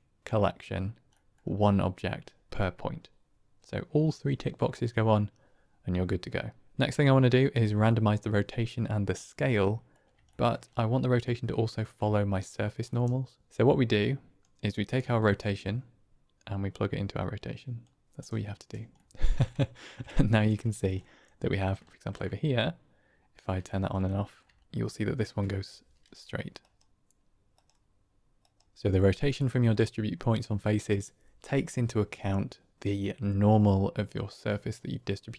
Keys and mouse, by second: 1.1 middle click, 9.4-9.8 middle drag, 10.2 shift+middle drag, 10.6-11.1 middle drag, 11.4-11.7 shift+middle drag, 12.9-13.5 middle drag, 13.9 click, 15.1-17.7 drag, 18.2-18.6 middle drag, 18.9 shift+middle drag, 19.5 ctrl+middle drag, 20.1-20.6 shift+middle drag, 20.8 middle click, 21.8 shift+middle click, 22.1-23.3 drag, 23.6 shift+drag, 24.0 click, 24.5 shift+click, 26.5 ctrl+alt+click, 28.3 ctrl+alt+click.